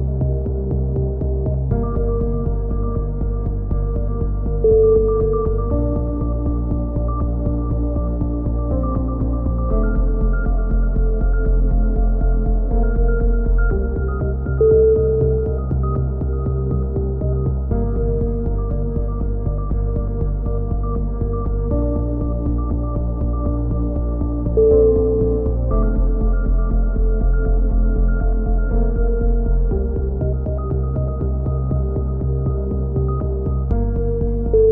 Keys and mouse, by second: 2.0-3.1 drag, 3.4 click, 4.9-6.2 right drag, 6.2 click, 7.6 s, 10.0 a, 10.6 ctrl+r, 12.9-14.0 right drag, 14.1 s, 15.5 ctrl+z, 16.2 a, 16.6 b, 20.6 click, 21.9-23.2 drag, 23.2 a, 23.3 z, 23.8 a, 24.2 a, 25.4-27.2 drag, 26.0 Tab, 27.3-29.7 middle drag, 29.7 KP_7, 30.1 z, 31.6 KP_3, 32.0 z, 32.4 Tab, 34.6-34.7 drag.